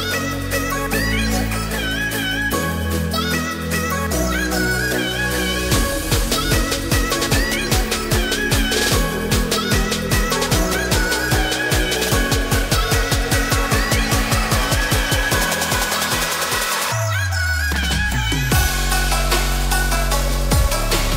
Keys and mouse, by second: 0.8 click, 2.2 3, 3.7 click, 7.1 ctrl+shift+KP_Add, 13.0 ctrl+shift+KP_Add, 15.9 ctrl+alt+shift+click, 18.2 ctrl+alt+shift+click, 18.8 ctrl+alt+shift+click, 20.8 click, 21.0 middle click.